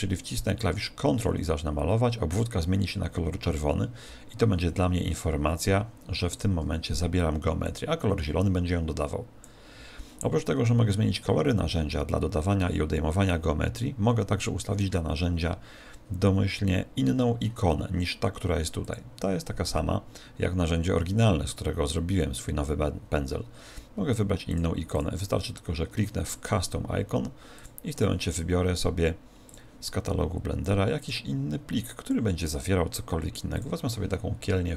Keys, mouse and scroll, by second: 0.6 ctrl+click, 7.6 click, 18.8 click, 24.9 click, 27.5 click.